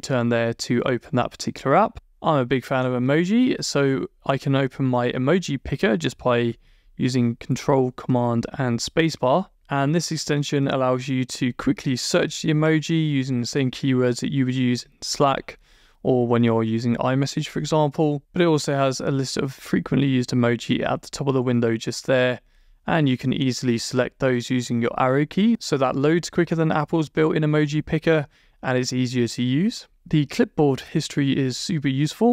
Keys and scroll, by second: 19.7 Right, 20.7 Up, 21.2 Down, 21.5 Right, 21.7 Up, 22.5 Left, 30.4 Down, 30.7 Return.